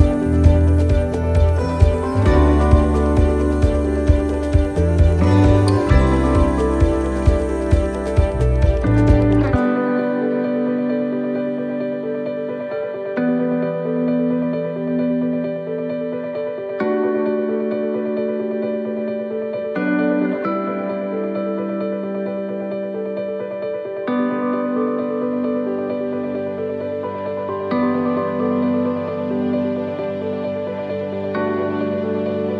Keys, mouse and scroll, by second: 0.0 shift+right click, 0.5-10.0 shift+right click, 10.0 middle click, 10.3-10.9 scroll down 4, 11.8 e, 13.3 middle click, 16.1 ctrl+r, 17.5 s, 20.5 s, 26.1 middle click, 26.5 scroll up 1, 27.0 middle click, 27.4 scroll up 2, 28.0 shift+middle click, 28.4 middle click, 29.1 shift+middle click, 29.7 middle click, 30.4 shift+middle click, 31.4 a, 31.8 middle click, 32.1 scroll down 1.